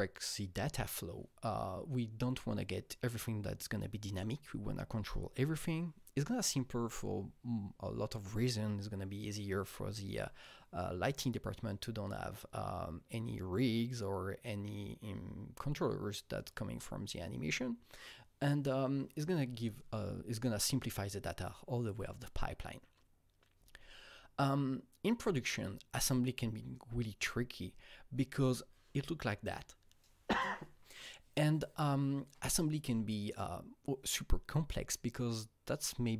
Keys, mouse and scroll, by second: 23.5 Right, 27.7 Right.